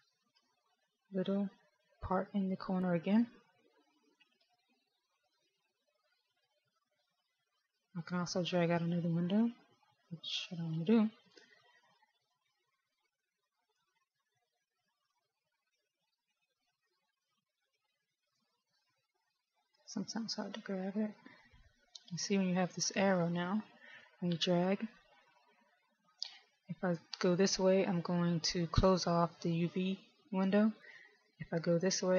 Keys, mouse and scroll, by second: 10.5 click, 16.5 click, 19.8 click.